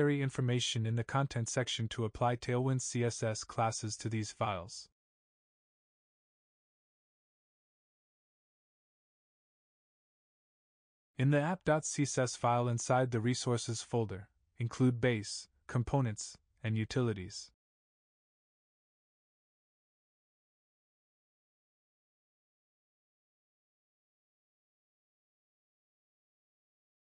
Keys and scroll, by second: 1.5 ctrl+c, 4.4 ctrl+v, 10.9 ctrl+c, 14.6 ctrl+v, 19.0 ctrl+c, 19.6 ctrl+s.